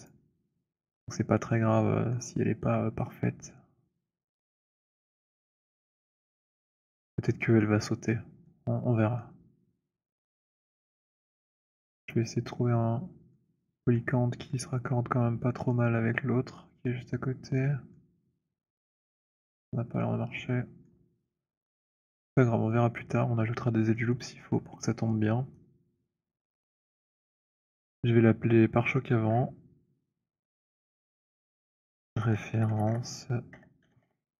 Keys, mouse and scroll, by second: 0.0 click, 1.9 middle click, 3.3 middle click, 4.7 middle click, 11.2 middle click, 14.0 middle click, 14.9 middle click, 15.9 middle click, 16.8 middle click, 17.8 middle click, 19.7-20.4 scroll, 21.0-21.4 scroll, 21.9-22.6 scroll, 23.1 scroll, 24.2 scroll, 24.5 middle click, 26.6 right click, 29.2 middle click, 29.3 middle click, 30.6 click, 30.8 click, 31.7-34.4 typing.